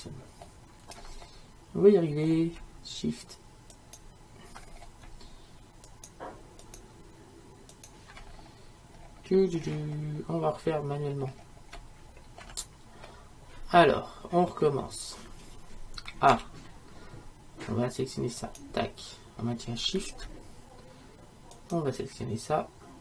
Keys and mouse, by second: 1.2-3.8 middle drag, 3.8-9.6 right drag, 9.6-12.3 middle drag, 13.4-14.7 middle drag, 16.4 a, 18.4-23.0 right drag.